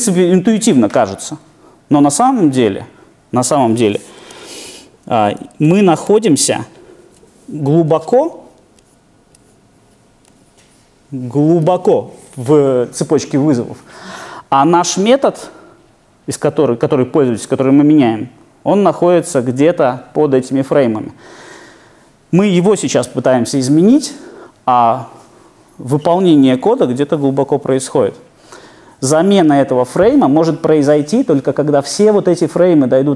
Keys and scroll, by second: 4.3 super+e, 5.1 Left.